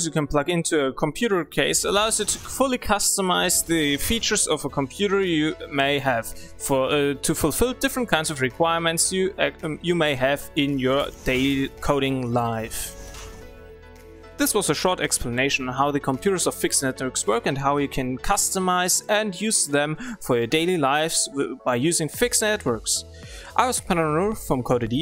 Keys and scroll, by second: 5.8 w.